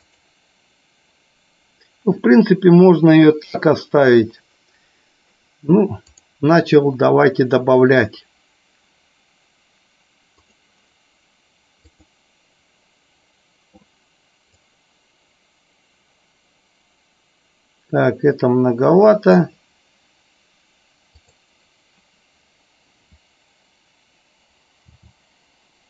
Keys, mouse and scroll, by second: 0.7 click, 6.1 click, 10.4 click, 15.0-20.2 drag.